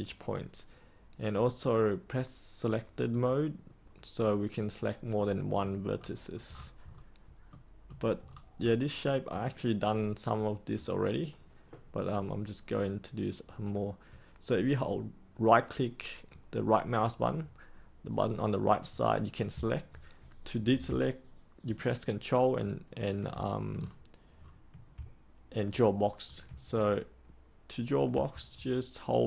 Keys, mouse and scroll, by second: 5.1 middle click, 5.9-6.3 scroll down 1, 6.4-7.5 scroll up 1, 7.5 middle click, 8.2-9.2 scroll up 1, 9.2-20.7 right drag, 21.6 ctrl+right click, 23.7-24.9 scroll down 1, 25.6 ctrl+right click, 28.5-29.2 right drag.